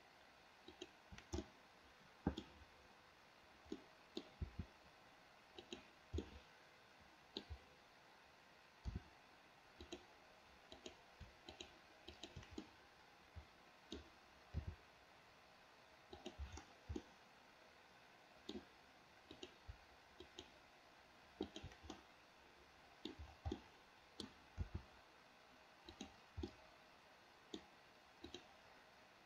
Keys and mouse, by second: 0.7 shift+click, 1.5-2.5 middle drag, 3.8 middle click, 4.5 r, 6.3-7.5 middle drag, 9.0 r, 10.8 click, 11.5 click, 12.2 shift+click, 12.7-14.0 middle drag, 14.7 r, 17.1-18.6 middle drag, 19.4 click, 20.2 shift+click, 21.5 shift+click, 22.0-23.2 middle drag, 23.6-24.3 middle drag, 24.7 r, 26.5-27.7 middle drag, 28.3 click.